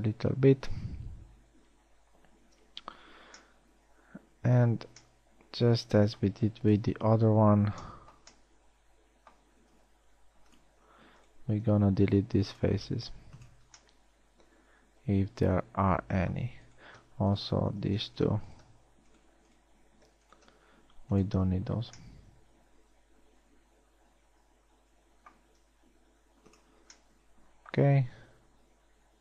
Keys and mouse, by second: 0.2 a, 7.4 KP_1, 10.5 ctrl+Tab, 11.4 z, 12.3 x, 21.3 x, 26.3 ctrl+Tab.